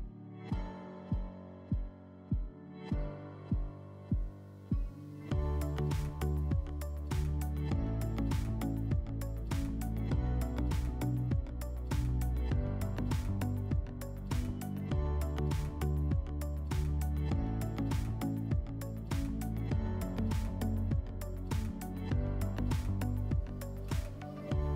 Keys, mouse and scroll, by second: 14.4-15.9 drag, 17.5-19.0 drag, 24.1 click.